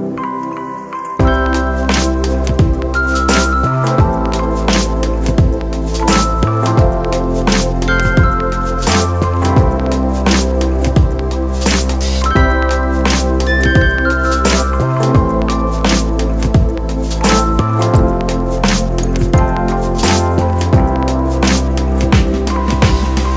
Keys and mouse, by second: 0.2 shift+click, 1.2-4.8 shift+drag, 4.8-8.5 shift+drag, 9.0 shift+click, 14.5 ctrl+t, 15.5 shift+t, 16.7 alt+shift+click, 18.6 ctrl+z, 22.6 ctrl+z, 23.2-23.3 ctrl+drag.